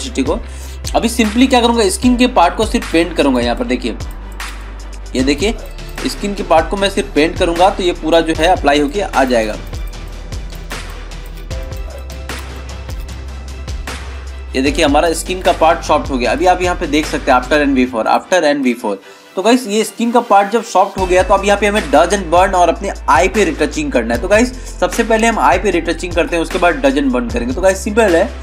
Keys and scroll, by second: 19.4 ctrl+-, 19.9 ctrl+0, 20.3 ctrl+-, 21.3 ctrl+=.